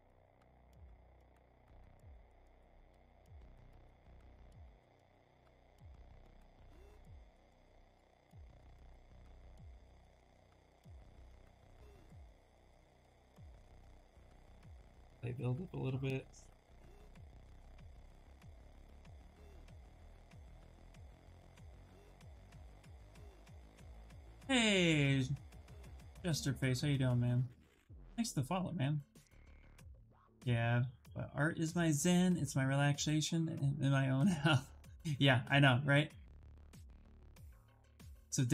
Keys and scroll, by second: 14.3 b.